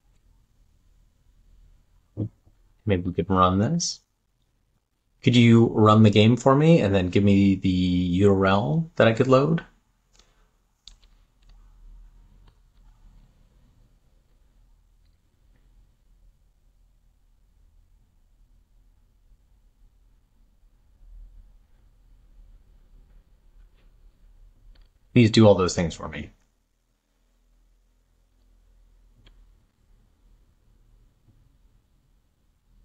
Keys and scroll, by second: 11.0 super+v, 26.7 super+v.